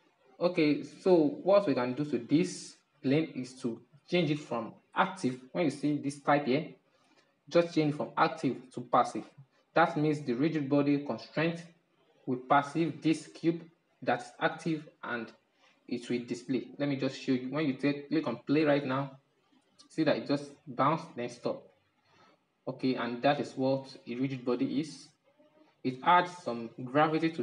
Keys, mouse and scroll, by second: 7.4-10.4 drag, 15.3-17.7 middle drag, 17.7-20.8 drag, 24.0-25.8 drag, 25.8-27.4 middle drag.